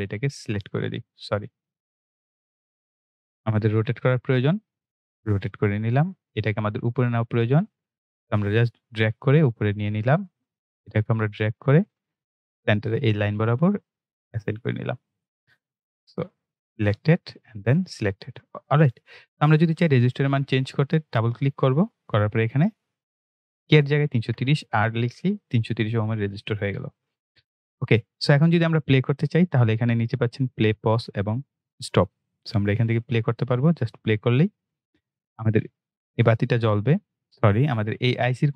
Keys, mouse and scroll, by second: 1.2 right click, 1.8 click, 5.1 click, 8.7 click, 11.8 click, 20.8-25.0 drag, 25.0 shift+r, 26.2 click, 33.7 click, 37.2 click.